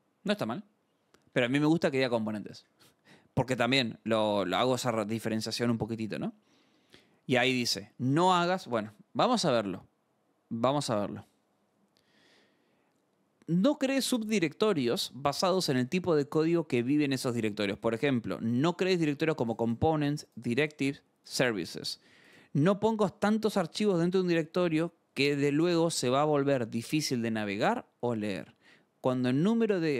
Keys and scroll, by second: 1.3 Return, 2.6 shift+;, 4.4 alt+Tab, 5.7 scroll.